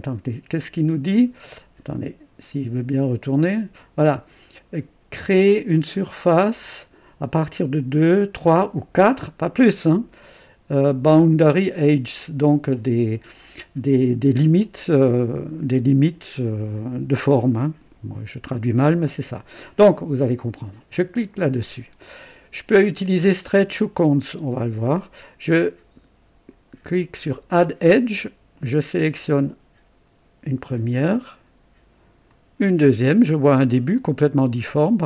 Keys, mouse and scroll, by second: 20.9 click, 27.2 click, 29.1 click, 32.2 click, 33.6-35.0 drag.